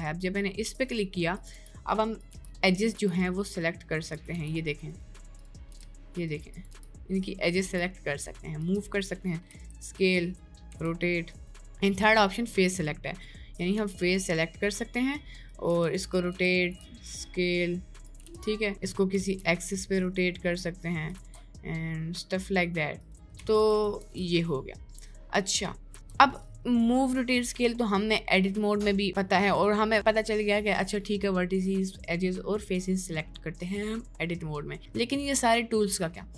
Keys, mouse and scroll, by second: 0.8 click, 1.4 click, 1.6 g, 2.2 click, 3.0 g, 3.6 right click, 4.2 click, 4.4 g, 5.8-9.6 typing, 10.9 r, 11.8 click, 13.4 right click, 14.0 g, 15.8 r, 16.4 d, 16.8 s, 18.2 r, 18.7 middle click, 19.2 r, 20.4 middle click, 21.1 r, 23.4 ctrl+z, 24.0 Tab, 24.3-24.9 middle drag, 25.5 middle click, 25.9 Tab, 26.2 right click, 26.5 middle click.